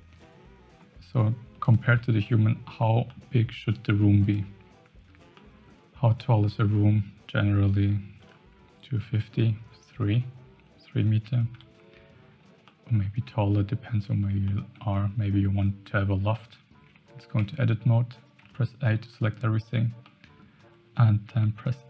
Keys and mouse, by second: 1.9 Tab, 2.2 middle click, 3.0 middle click, 5.3-5.6 middle drag, 11.5 KP_1, 12.6-13.0 shift+middle drag, 14.4 shift+middle drag, 17.3 Tab, 18.4 a, 19.1 middle click, 20.0 middle click.